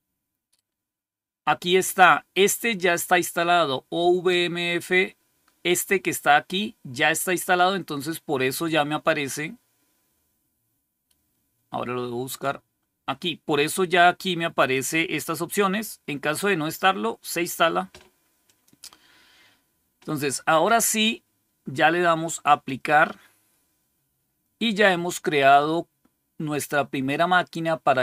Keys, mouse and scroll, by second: 12.2 click, 14.5 click, 18.3 click, 22.4 click.